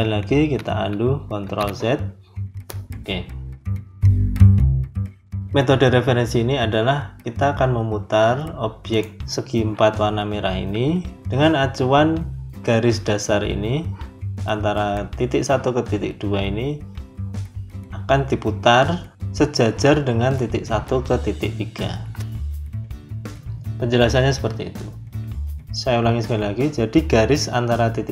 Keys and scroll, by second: 1.3 ctrl+z, 11.2 Escape.